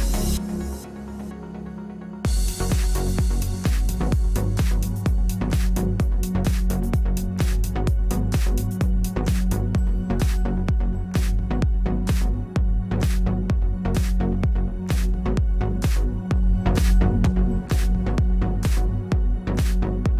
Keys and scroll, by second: 3.5 space, 4.4 space, 15.6 f.